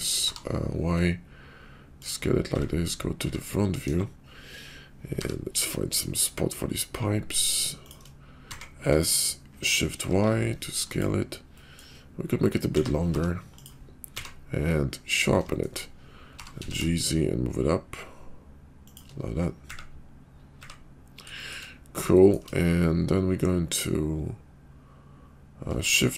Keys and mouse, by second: 2.5 `, 3.2 `, 3.8 KP_5, 5.2 g, 8.5 s, 11.4 middle click, 12.6 s, 14.1 q, 15.5 shift+click, 16.3 g, 20.6 `, 21.3 shift+drag, 22.1 shift+drag, 25.8 shift+d.